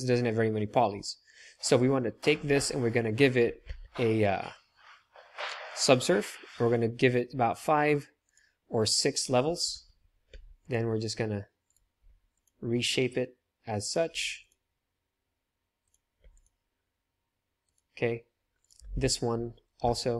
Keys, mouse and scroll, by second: 1.5 click, 3.7 ctrl+3, 5.7-11.7 drag, 9.6 Tab, 10.2 ctrl+r, 12.0 ctrl+r, 14.1 ctrl+r, 16.1 ctrl+r, 19.9 Tab.